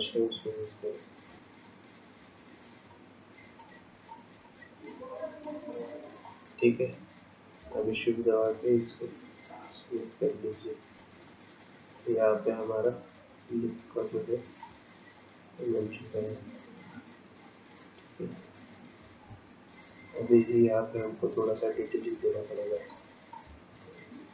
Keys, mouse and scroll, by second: 1.0 click, 1.7 click, 4.0 click, 4.5 click, 5.7 click, 6.3 click, 7.8 shift+click, 11.3 shift+click, 14.9-16.4 scroll down 11, 16.5 scroll down 4, 18.9-20.4 scroll up 10, 21.2-21.8 scroll up 3, 22.9 shift+middle click, 23.5-24.3 scroll up 1.